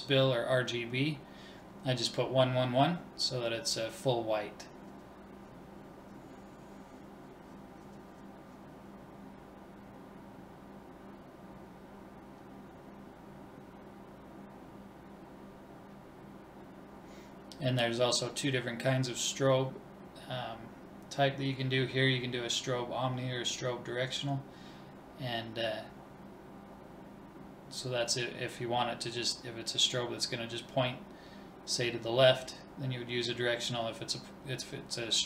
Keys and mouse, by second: 3.7-5.5 drag, 7.4-9.3 drag, 8.9 BackSpace, 23.4-25.3 drag, 29.8-31.5 drag, 33.5-35.2 drag.